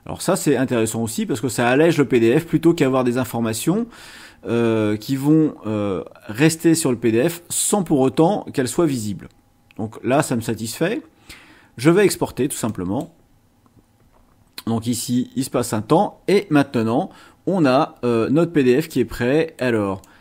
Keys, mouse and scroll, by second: 12.7 click, 18.9 click, 20.0-20.2 drag.